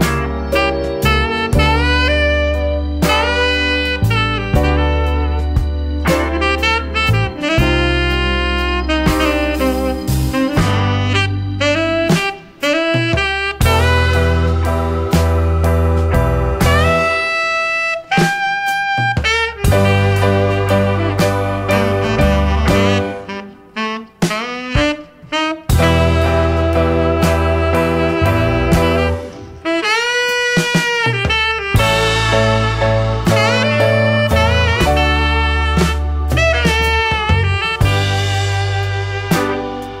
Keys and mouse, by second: 2.8 click, 4.4-5.2 drag, 6.4-7.1 drag, 8.3-13.2 drag, 13.8-14.9 drag, 16.8 click, 20.4 click, 20.8 click, 21.9-23.6 drag, 25.7 click, 26.0 click, 28.0-28.9 drag, 29.5 click, 30.3 click, 31.3-31.6 drag, 32.0-32.8 drag, 33.5 shift+a, 36.8-37.4 drag, 37.8-38.7 drag, 39.3-40.0 drag.